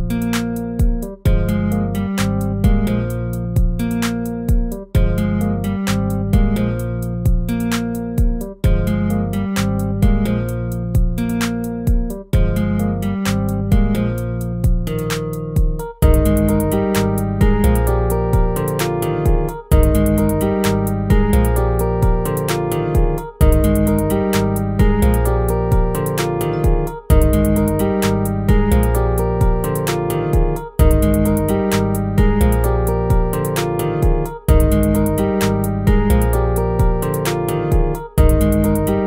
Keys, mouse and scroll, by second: 27.0 ctrl++, 32.3 ctrl+-, 36.7 ctrl++, 38.1 ctrl+z.